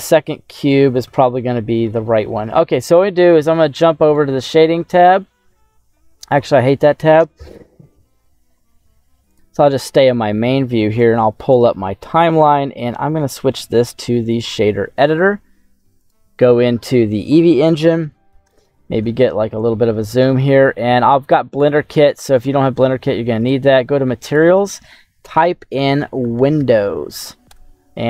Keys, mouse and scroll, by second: 1.0 /, 1.8 middle click, 2.5 scroll up 1, 2.8-4.2 scroll down 1, 6.2-7.3 drag, 10.9 click, 12.3-14.5 drag, 15.9 click, 17.5 middle click, 18.4 shift+middle click, 19.1-20.5 scroll up 2, 22.4 click, 23.3 click, 24.2-27.6 drag.